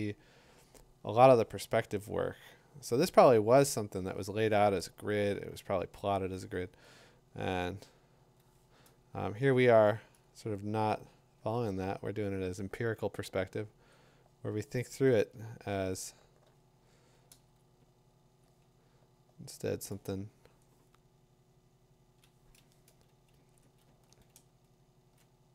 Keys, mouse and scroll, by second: 6.8 click, 9.3 ctrl+z, 18.3-21.6 drag, 21.3 3, 21.4 5, 21.4 6, 22.1 scroll, 22.1 middle click, 22.6 click, 23.4 [, 23.6 [, 23.8 [, 24.3-25.2 ].